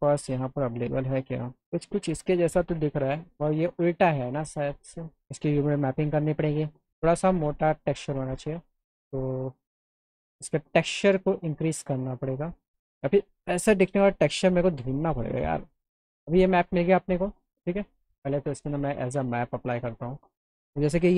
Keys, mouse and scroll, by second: 0.1 click, 0.9 click, 3.4 click, 5.0 click, 8.9 click, 10.5 click, 11.7 click, 15.0 click, 15.5 scroll up 1, 15.8 click, 17.8 click, 19.3 click, 19.4 click, 20.9 click.